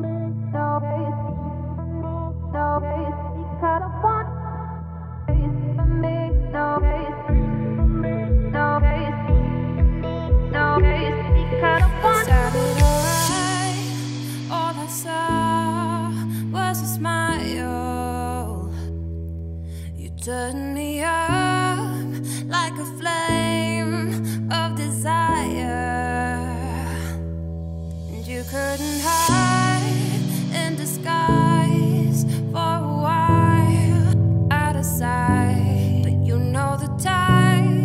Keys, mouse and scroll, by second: 0.3 ctrl+r, 6.7 click, 6.9 click, 7.1 typing, 7.4 click, 8.1 shift+click, 8.8 middle click, 9.2 e, 10.1 shift+middle click, 10.7 g, 12.3 2, 12.6 click, 13.6 alt+click, 14.2 `, 14.8 z, 15.3 click, 15.7 z, 16.0 g, 16.7-17.9 middle drag, 17.9-18.4 scroll up 3, 18.5 2, 18.7 click, 19.0-20.1 shift+middle drag, 20.1 shift+click, 21.0 ctrl+b, 23.9-25.3 middle drag, 25.3 Tab, 25.4 scroll down 2, 25.6-27.2 middle drag, 27.2 scroll up 1, 27.3 Tab, 27.5 middle click, 27.9 2, 28.0 click, 28.5-30.0 middle drag, 30.0 shift+click, 30.5-31.5 middle drag, 31.5 ctrl+b, 33.1 middle click, 33.8 shift+middle click, 34.0-34.9 scroll up 9, 34.2 z, 34.9 shift+middle click, 35.1-36.8 scroll up 5, 35.6 shift+middle click, 36.8-37.8 shift+drag.